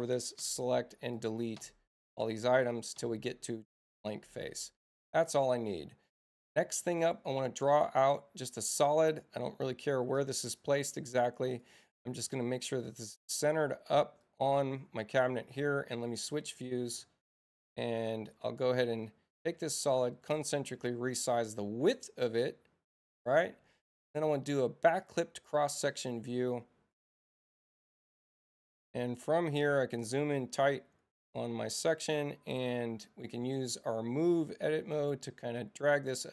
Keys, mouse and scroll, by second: 1.1 click, 2.7 click, 4.7 click, 7.0 click, 7.7 click, 11.5 click, 12.8 i, 14.2 click, 16.3 Tab, 17.9 click, 18.9 Return, 19.5 ,, 20.4-21.9 drag, 24.1 click, 25.0 click, 30.0 click, 31.6 click, 34.8-35.7 scroll up 1, 35.7-36.3 scroll up 1.